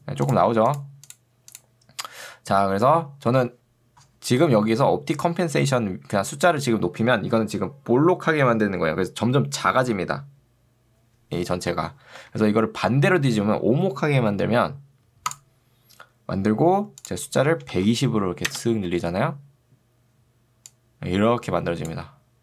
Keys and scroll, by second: 4.7 ctrl+2, 12.3 Escape, 17.7 2, 18.5 Return.